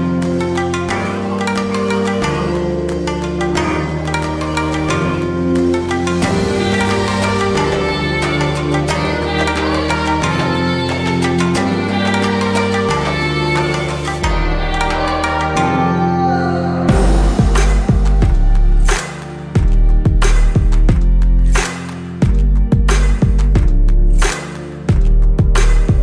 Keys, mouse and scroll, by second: 1.9-5.2 drag, 8.2-8.9 drag, 24.8 Down.